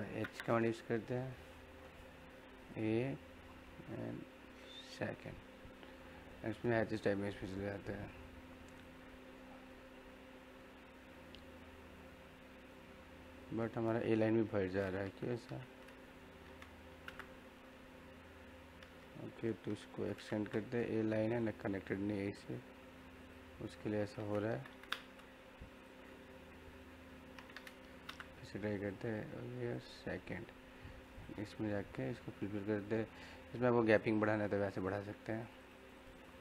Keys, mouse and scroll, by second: 0.2 space, 2.5 click, 2.5 typing, 9.3-9.6 scroll up 1, 10.5 scroll up 1, 11.2 middle click, 11.6 scroll up 1, 11.9-13.6 middle drag, 13.6 scroll down 1, 13.9 middle click, 14.5 ctrl+z, 16.0-16.9 scroll up 1, 16.9 h, 17.0 space, 18.5-18.9 scroll up 1, 19.6-20.1 typing, 21.2 click, 23.5 scroll up 1, 24.5-24.9 typing, 25.9-27.1 scroll down 1, 27.1 middle click, 27.9 typing, 28.7 click, 30.0 middle click, 31.1 click, 33.9 click, 33.9 typing.